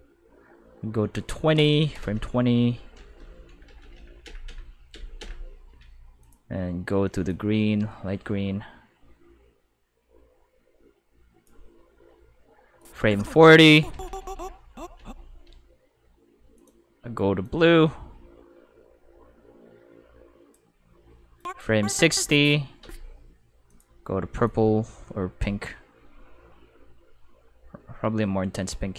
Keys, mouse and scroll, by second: 1.5 click, 6.2 click, 7.3-11.4 drag, 12.8 click, 16.6 click, 17.4-20.5 drag, 21.3 click, 23.6 click, 24.4-28.9 drag.